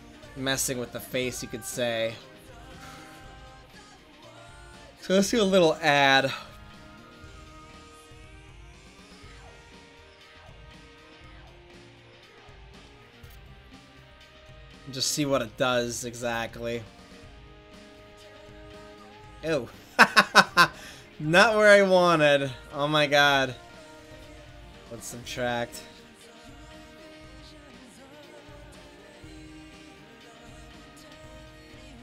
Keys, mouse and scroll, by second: 6.6 f, 7.8-10.1 drag, 11.2 right click, 12.5-14.0 middle drag, 14.0 right click, 15.2-16.7 drag, 16.9 click, 17.0 right click, 17.1 click, 17.8 click, 18.1 middle click, 18.3 middle click, 20.4 middle click, 25.1-25.7 drag, 27.2 click, 27.8 middle click.